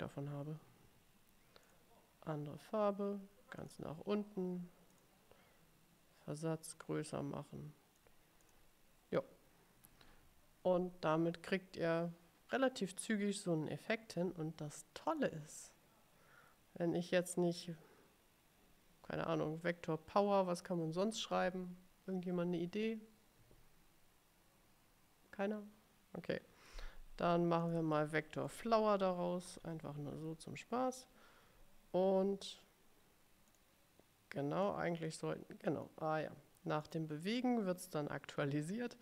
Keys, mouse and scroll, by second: 1.7 click, 3.7 click, 5.0 click, 6.5-8.3 drag, 8.6 click, 15.2 click, 27.7 click, 28.6 BackSpace, 29.7 shift+f, 30.2 l, 33.6 click, 34.7-36.2 drag, 36.9 click.